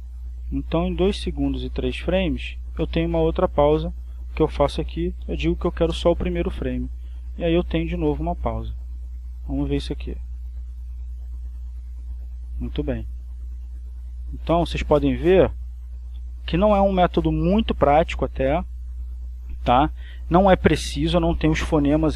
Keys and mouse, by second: 1.3-3.1 drag, 4.4 click, 5.2 1, 5.6 f, 6.2 Return, 7.5-8.7 drag, 8.8 click, 9.8 click, 12.8 click, 13.6-14.8 drag, 15.0 click, 17.6 click, 19.6-21.0 drag.